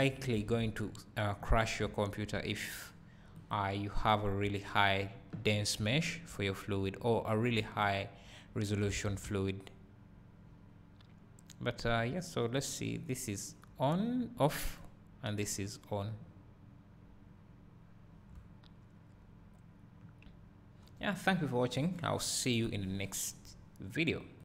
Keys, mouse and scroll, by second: 0.6 alt+a, 1.2-1.6 scroll down 1, 1.9 `, 4.0 `, 7.7 click, 9.0 alt+a, 9.3 `, 13.4 click, 17.6 click, 18.4 `.